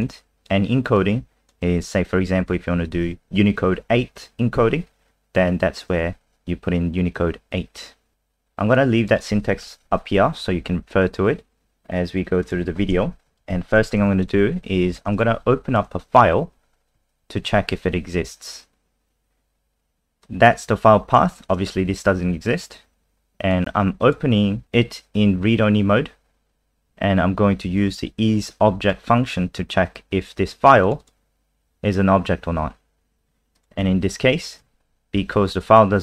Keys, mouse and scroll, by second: 9.7 Delete, 9.9 Delete, 11.7 click, 11.7-12.4 scroll down 2, 12.5 click, 13.3 Home, 13.3 shift+Down, 13.5 shift+End, 14.0 ctrl+c, 14.9 Return, 15.1 Return, 15.7 BackSpace, 17.4 ctrl+v, 20.2 click, 31.0 click, 33.5 click, 34.6 ctrl+s.